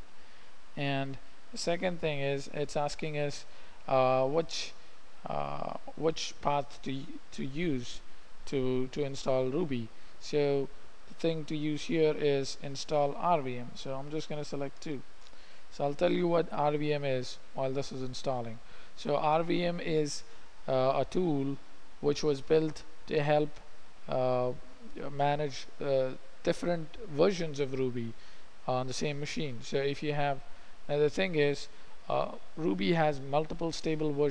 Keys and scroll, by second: 0.1 Return, 0.8 typing, 15.1 2, 15.5 Return.